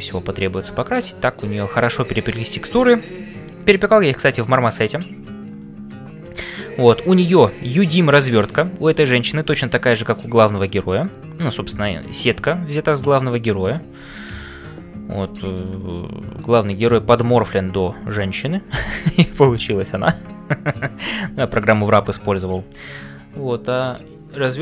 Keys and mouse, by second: 15.4 shift+middle click, 23.8 click.